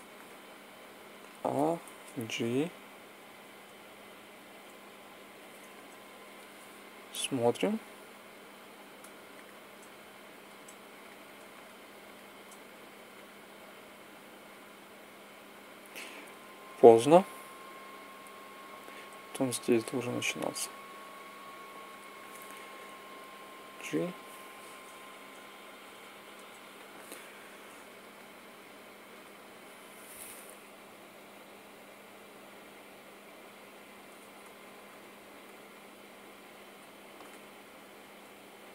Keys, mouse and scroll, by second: 0.7 a, 1.9 g, 9.1-10.1 drag, 23.5 g, 30.4 Right, 30.7 Right, 30.8 Right, 31.1 Right, 31.5 Right, 34.2 Right, 34.6 Right, 35.2 Right, 36.9 Left, 37.2 Left, 37.5 Left, 37.6 Left, 37.9 Left.